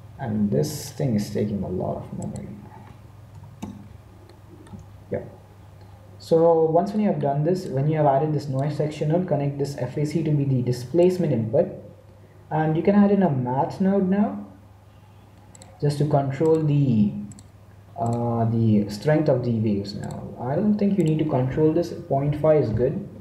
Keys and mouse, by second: 0.6-4.2 drag, 4.2-7.0 middle drag, 7.6-9.4 drag, 11.0 click, 12.9 shift+a, 16.7-19.0 drag, 19.9-21.7 drag.